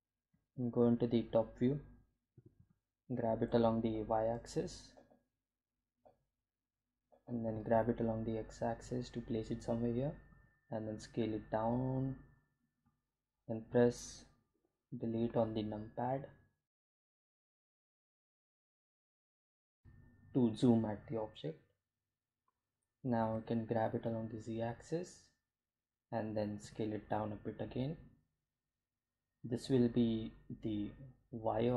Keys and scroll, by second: 2.0 Home, 3.5 g, 3.7 x, 5.0 y, 8.3 g, 8.5 x, 11.0 s, 15.1 Delete, 23.2 g, 23.3 z, 26.6 s.